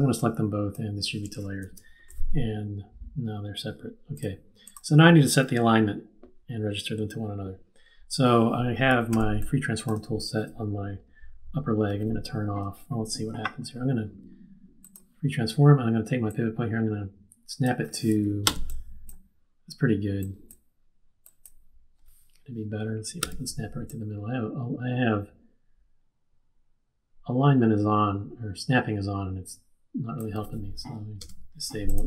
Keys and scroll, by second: 1.6 shift+super+d, 9.1 z, 18.4 z, 23.2 q, 31.2 super+/.